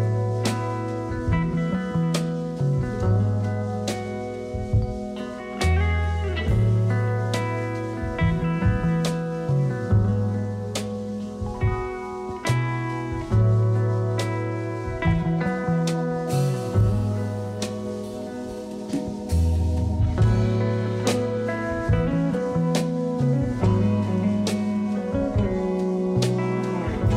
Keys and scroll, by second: 1.0 x, 1.8 s, 5.6 s, 7.9 s, 11.4 s, 15.1 s, 17.3 s, 23.7 s, 24.7 4, 25.0 s, 26.8 ctrl+z.